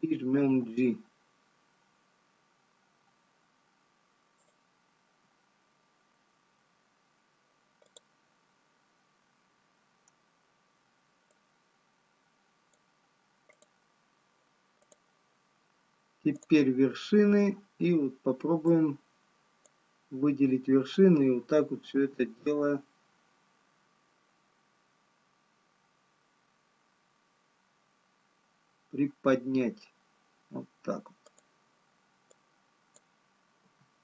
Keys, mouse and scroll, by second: 9.0 click, 9.0-12.7 scroll down 1, 12.7 click, 14.9 click, 20.1 click, 25.7 g, 32.4 click, 33.9 g.